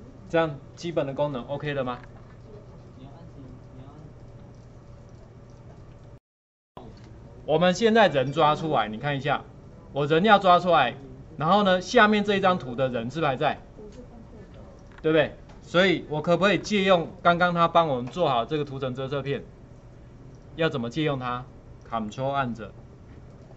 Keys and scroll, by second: 6.2 ctrl+F9.